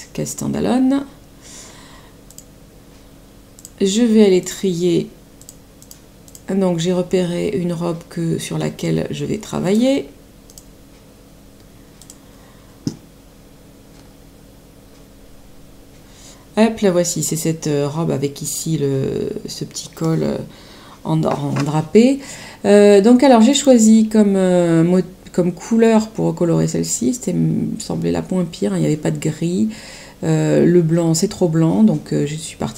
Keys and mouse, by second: 2.2 click, 3.5 click, 9.6 click, 11.9 click, 23.4 click.